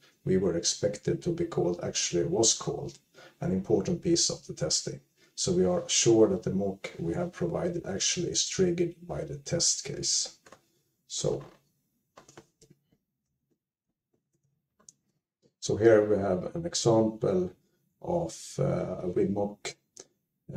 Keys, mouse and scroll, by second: 13.1-13.9 typing, 13.3 click.